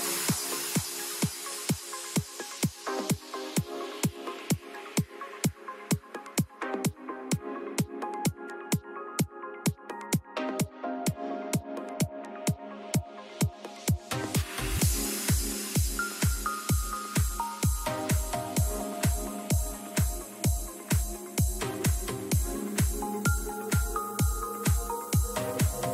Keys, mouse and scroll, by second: 5.3 Tab, 5.8 middle click, 7.0 middle click, 7.2 middle click, 7.3 middle click, 10.0-11.1 middle drag, 12.3 Tab, 13.6 a, 14.1 a, 18.1 a, 18.4 a, 19.2-20.6 right drag, 20.6 middle click, 24.9-25.9 right drag, 25.7-25.9 drag.